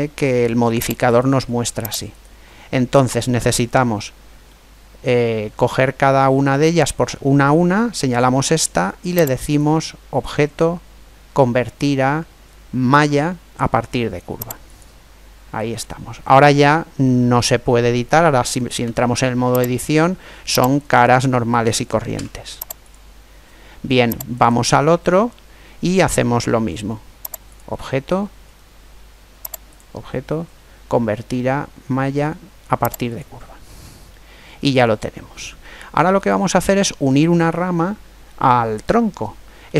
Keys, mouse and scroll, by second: 0.8-3.8 right drag, 4.3-6.2 middle drag, 9.2-10.9 drag, 18.6 Tab, 20.5 right click, 21.9 Tab, 24.1 right click, 27.3-29.0 drag, 29.4 click, 31.2 click, 33.9-35.8 middle drag, 35.9-37.7 middle drag, 39.5-39.7 middle drag.